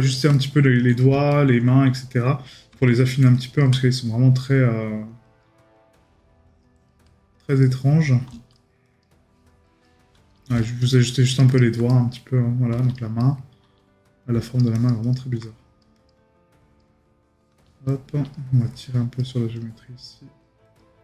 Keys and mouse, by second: 11.9 right click, 13.2 right click.